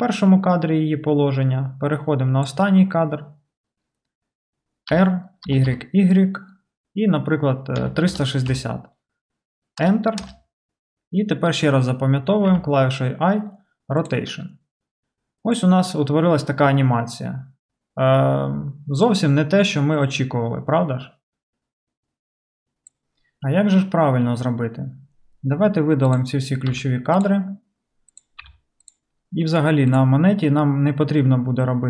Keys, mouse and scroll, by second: 4.9 r, 12.5 i, 26.2-28.1 middle drag, 26.7 x, 28.1 click, 28.4-30.0 middle drag, 28.4 x, 30.0-31.8 drag.